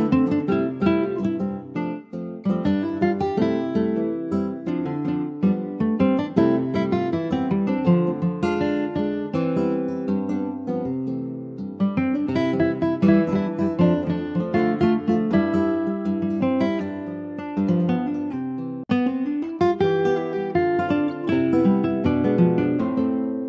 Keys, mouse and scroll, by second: 2.6 click, 2.9 Tab, 3.4 middle click, 3.8 Tab, 4.0 click, 4.3 middle click, 4.7 ctrl+s, 4.9 click, 5.7 /, 6.3-6.6 scroll down 2, 6.6 middle click, 7.3-7.8 scroll down 3, 7.8-8.8 middle drag, 8.8 click, 9.2 middle click, 9.9 scroll down 2, 10.1 middle click, 10.7 ctrl+s, 10.9 scroll up 2, 11.1 middle click, 11.8 shift+middle click, 12.3 click, 14.9 s, 18.2 middle click, 19.1 click, 19.3-19.6 scroll down 3, 19.6-21.5 middle drag, 21.5-21.9 scroll up 2, 22.0 ctrl+s, 22.0 click, 22.4-23.4 middle drag.